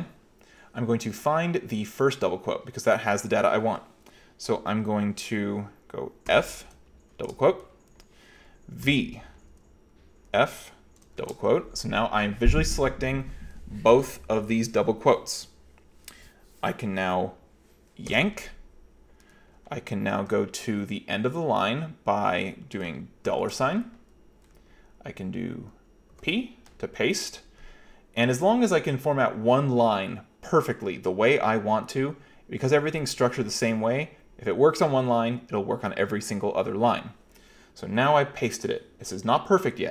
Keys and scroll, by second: 6.3 f, 7.2 shift+', 8.9 v, 10.3 f, 11.2 shift+', 18.1 y, 23.3 $, 26.2 p.